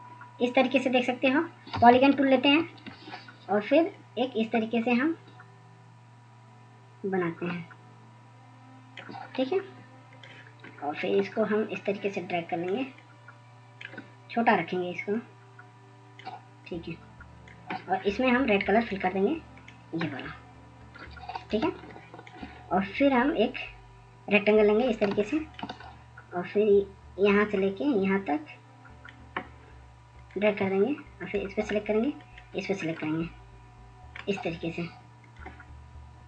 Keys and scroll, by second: 1.6 scroll, 4.9 ctrl+s, 5.3 ctrl+s, 27.9 ctrl+space, 28.2 ctrl+space, 28.3 ctrl+space.